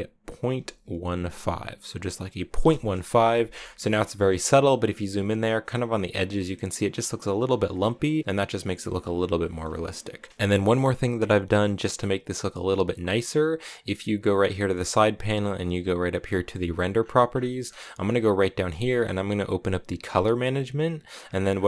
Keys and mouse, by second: 3.6 a, 4.0 shift+click, 7.7 shift+click, 9.6 shift+click, 13.6 click, 16.0 click, 19.9 click, 20.8 click.